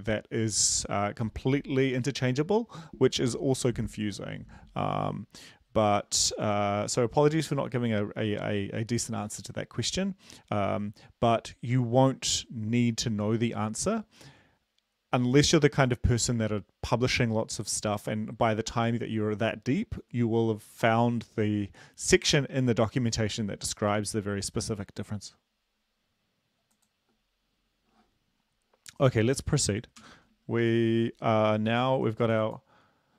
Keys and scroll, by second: 30.0 ctrl+l, 30.7 ctrl+l, 30.7 super+Left.